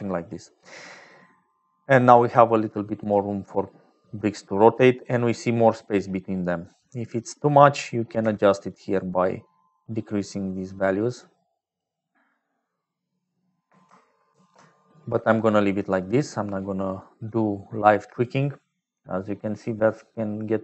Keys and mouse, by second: 0.7 middle click, 1.4 click, 2.6 click, 6.6 click, 8.6-12.4 shift+drag, 14.9 ctrl+z, 16.7 click, 17.8 click.